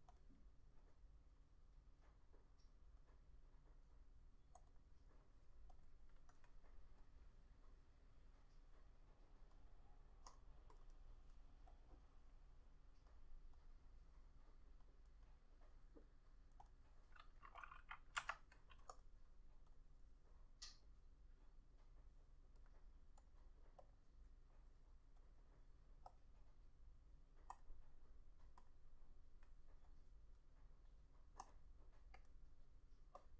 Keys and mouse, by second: 4.8 double click, 11.0 double click, 16.8 double click, 18.3 F6.